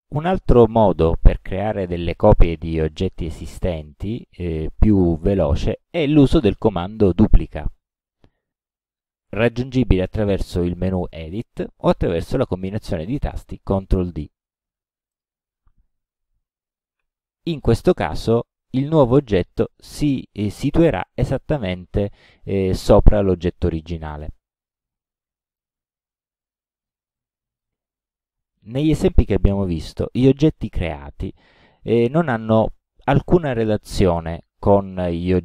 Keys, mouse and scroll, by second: 3.8-5.1 drag, 8.7 click, 15.2 click, 17.0 ctrl+d, 18.0-19.7 ctrl+drag, 24.7-25.8 drag, 27.2 click, 28.2 click.